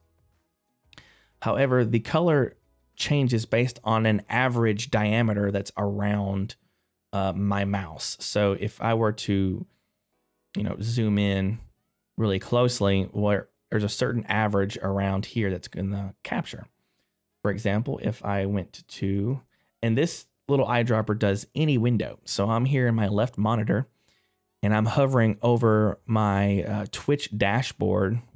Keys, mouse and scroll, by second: 9.2 middle click, 10.5 scroll up 1, 15.7 scroll down 1, 19.1 middle click.